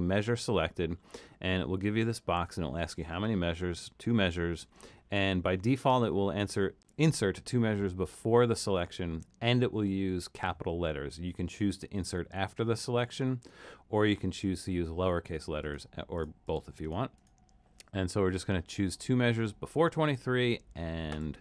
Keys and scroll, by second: 3.8 2.